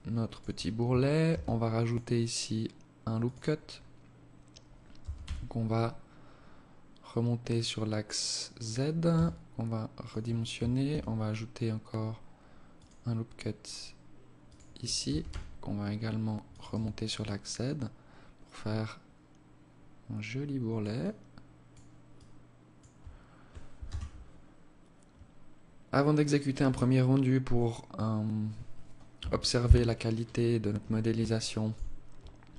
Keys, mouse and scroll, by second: 0.6 ctrl+r, 4.3 g, 8.4 s, 10.2 ctrl+r, 14.3 g, 16.1 Tab, 16.5 alt+click, 20.3 alt+click, 21.5 alt+click, 23.1 KP_0, 28.5 KP_1, 29.4 scroll down 9, 30.7 alt+shift+click.